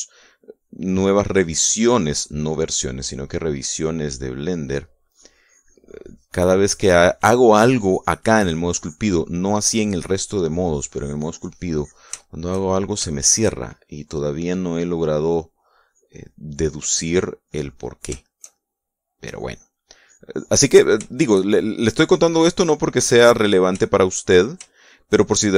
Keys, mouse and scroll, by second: 3.6-11.0 drag, 11.4-12.8 drag, 13.3 shift+click, 13.8 shift+click, 14.4 shift+click, 15.4-18.6 drag, 18.8 shift+click, 19.9 click, 20.6-21.6 drag, 21.7 shift+middle click, 22.6-24.3 drag, 24.4 shift+middle click, 25.4 shift+click.